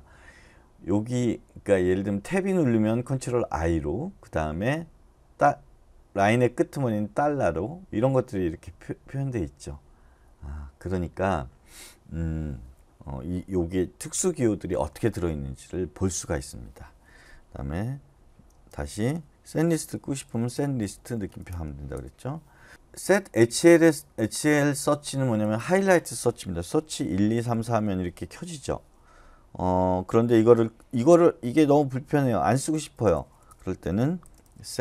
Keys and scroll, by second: 19.7-21.4 typing, 21.9 Return, 23.5 typing, 26.5-27.6 typing, 32.7-34.7 typing.